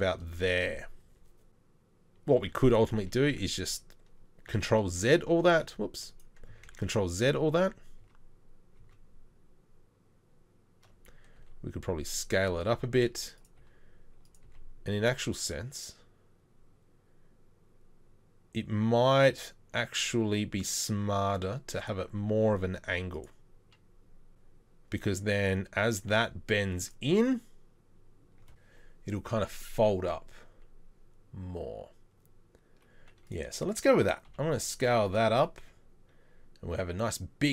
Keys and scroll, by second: 2.5 ctrl+a, 6.7 ctrl+z, 7.2 ctrl+z, 7.6 ctrl+z, 8.0 ctrl+z, 8.8 ctrl+z, 11.4 s, 12.6 g, 13.6 r, 14.5 g, 22.2 r, 34.3 s, 35.3 s, 35.3 g.